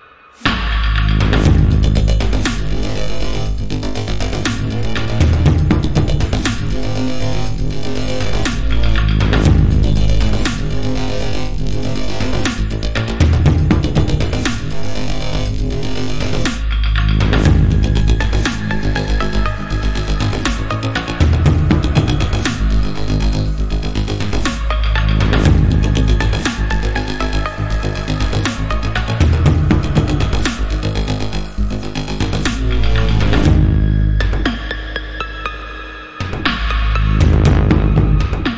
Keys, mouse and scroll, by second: 0.9 alt+scroll up 1, 2.6-3.6 scroll down 1, 3.6 click, 5.1 scroll down 1, 7.5 a, 8.1 click, 10.2 i, 11.3 click, 11.6 a, 12.1 click, 14.8 a, 15.1 click, 17.1 i, 17.9 click, 18.1 a, 19.2 click, 25.5 click, 27.6 a, 28.8 click, 33.8 click, 36.1 a, 36.6 click.